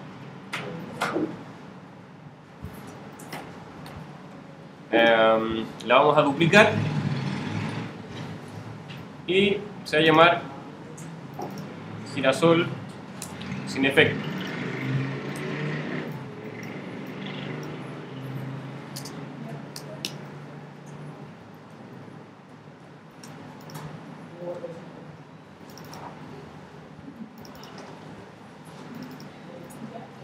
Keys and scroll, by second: 13.2 Return, 15.3 Return, 18.5 s.